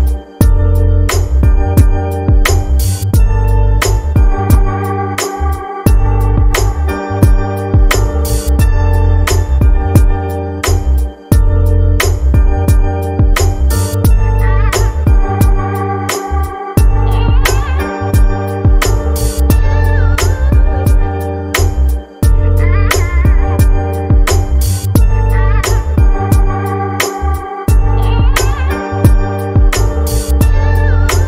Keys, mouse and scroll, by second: 0.3-0.6 scroll down 1, 3.6-6.6 drag, 9.0 middle click, 9.0-9.4 scroll down 4, 10.5-12.5 drag, 12.5-15.1 scroll down 6, 15.1-16.9 drag, 16.9 KP_3, 18.6 scroll down 1, 19.3 scroll down 2, 20.8-23.8 drag, 25.8 scroll down 3, 28.9-29.3 scroll down 4.